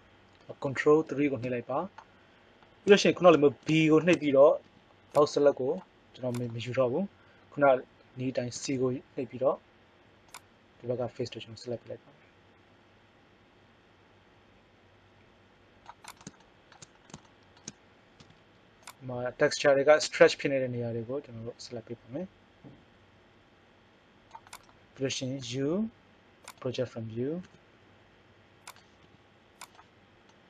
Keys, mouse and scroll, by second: 1.0 ctrl+KP_3, 4.7 b, 6.3 click, 8.6 c, 16.2-17.6 drag, 18.2 c, 25.3 u, 27.4 s, 29.0 g.